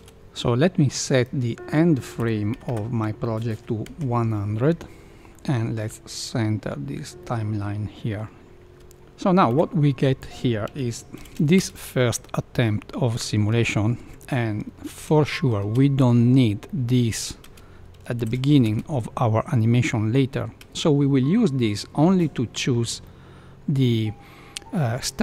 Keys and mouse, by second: 1.4-4.7 drag, 2.6 KP_0, 5.3-5.8 middle drag, 7.2-8.2 middle drag, 8.7 Left, 8.7 space, 9.5 KP_1, 11.2 shift+Left, 11.5 space, 13.5 space, 14.8 shift+Left, 15.5 space, 16.6 middle click, 17.4 space, 18.2 shift+Left, 18.6 space, 20.6 space, 23.0-24.0 middle drag.